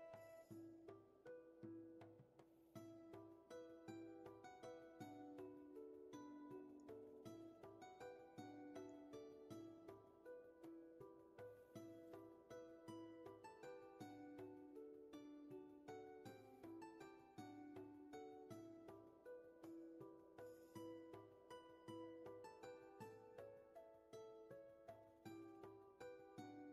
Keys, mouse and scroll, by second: 3.0 scroll up 1, 11.5 scroll down 1, 23.1 scroll down 1, 24.0 scroll down 1, 24.3 scroll up 1.